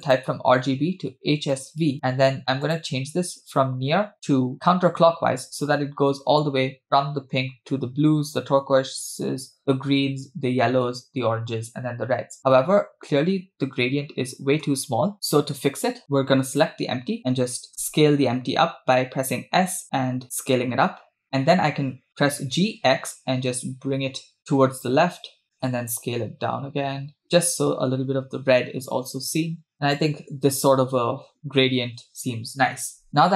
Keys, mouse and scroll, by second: 0.0-1.9 drag, 2.6-4.7 drag, 16.5 click, 17.7 s, 22.5 g, 25.8 s.